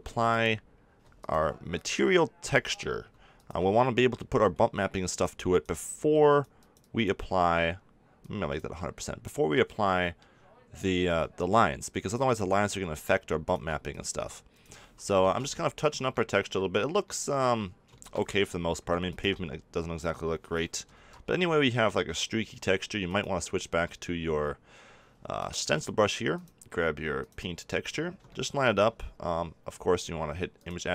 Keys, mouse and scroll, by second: 1.4-10.1 drag, 10.1-12.0 middle drag, 12.0 click, 12.4-15.2 middle drag, 15.2 ctrl+z, 15.5-16.9 middle drag, 18.1 middle click, 19.0-20.9 middle drag, 20.9 ctrl+z, 23.0-24.9 drag, 26.3-28.2 drag, 28.2 middle click, 30.5-30.9 drag.